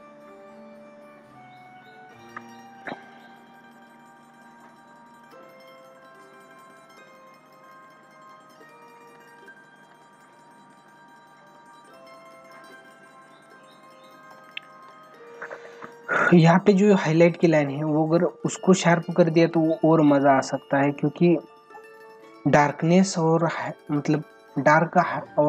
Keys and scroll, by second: 14.3 space, 17.4 ctrl+=, 24.9 ctrl+=.